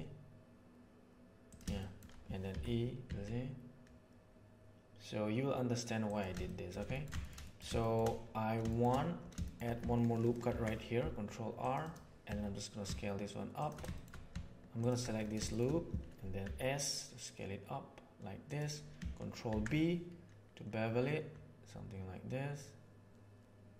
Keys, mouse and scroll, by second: 1.7 shift+middle click, 2.5 e, 6.4 shift+middle click, 6.8 ctrl+middle click, 10.4 ctrl+r, 12.2 s, 13.8 shift+middle click, 16.3 s, 19.4 ctrl+b.